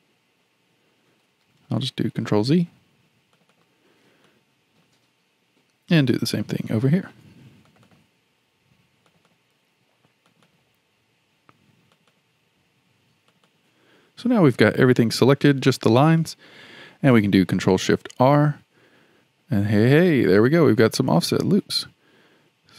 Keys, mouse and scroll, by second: 1.4 ctrl+z, 3.3 shift+click, 3.5 shift+click, 4.3-7.3 shift+middle drag, 7.7 shift+click, 7.9 shift+click, 9.1 shift+click, 9.3 shift+click, 10.3 shift+click, 10.5 shift+click, 11.9 shift+click, 12.1 shift+click, 13.3 shift+click, 13.5 shift+click, 14.2-18.6 shift+middle drag, 18.6 ctrl+shift+r.